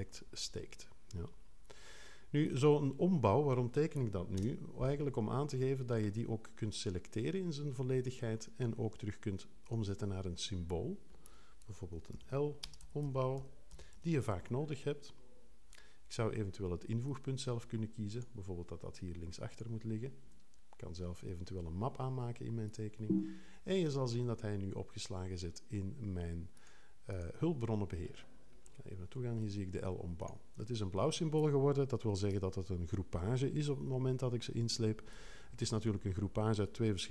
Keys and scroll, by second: 4.3 0, 12.1-14.6 typing.